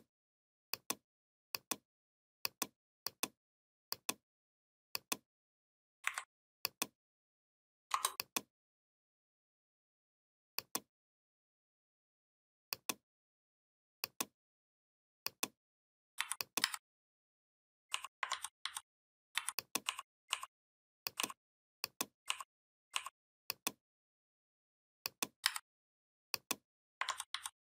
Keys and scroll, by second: 5.9 Delete, 16.0 v, 16.5 a, 18.2 ctrl+z, 25.3 a, 26.9 ctrl+z.